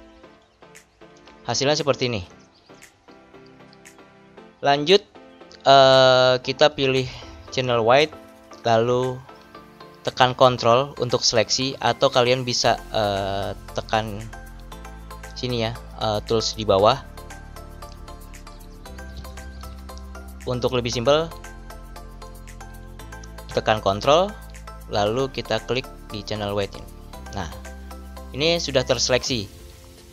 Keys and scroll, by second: 19.4 ctrl+d.